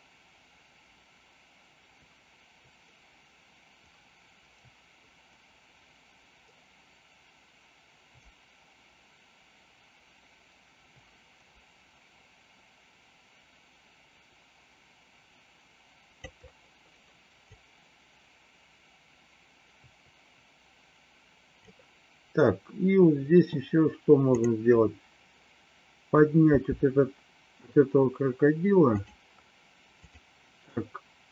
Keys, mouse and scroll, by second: 17.4-21.6 drag, 26.5 r, 30.0 click.